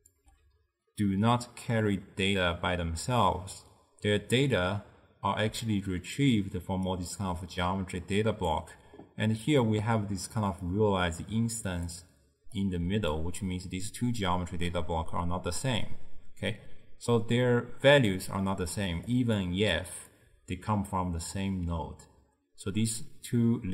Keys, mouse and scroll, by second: 0.0-0.2 typing, 4.7 middle click, 5.6-10.7 typing, 6.2 click, 7.8 click, 10.1-10.4 drag, 10.7-11.9 drag, 11.9-12.6 d, 12.7-13.2 drag, 13.2 d, 14.7 d, 18.9 d, 19.2 click, 19.4 d, 19.8 click, 20.2 d, 20.2 d.